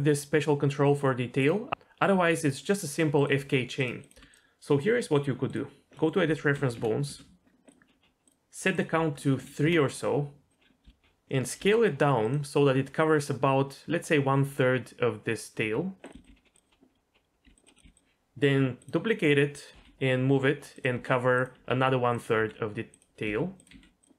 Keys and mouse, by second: 1.7 r, 2.1 r, 2.8 middle click, 3.1 click, 3.4 r, 3.8 middle click, 4.0 click, 4.1 r, 5.9 middle click, 6.7 KP_1, 7.0 KP_3, 7.7 click, 8.3-10.5 drag, 10.8 s, 11.6 g, 15.6-17.8 typing, 17.7 click, 18.8 click, 19.7 g, 20.9-23.7 typing.